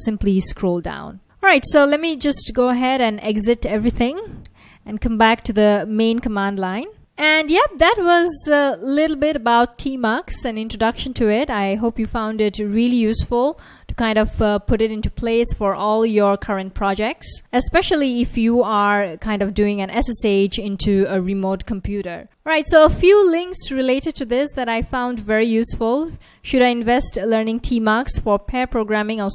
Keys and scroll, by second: 0.6 Down, 1.2 Down, 3.9 ctrl+c.